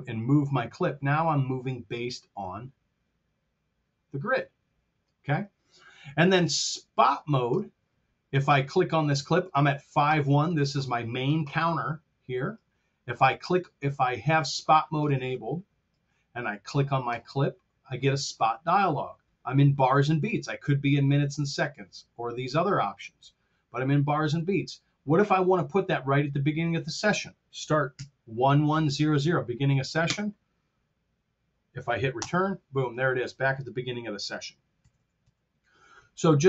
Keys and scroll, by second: 27.9 KP_1, 30.0 Home, 32.2 Return, 34.7 r.